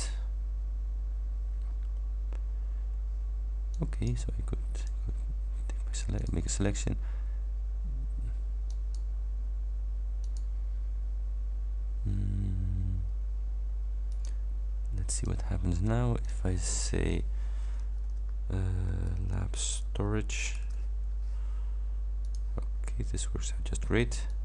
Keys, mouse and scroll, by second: 1.8-3.8 scroll down 2, 3.8 click, 4.9 click, 6.3 click, 8.8 click, 10.3 click, 14.2 click, 15.3 click, 16.3 click, 18.0-21.1 typing, 22.3 click, 24.3 click.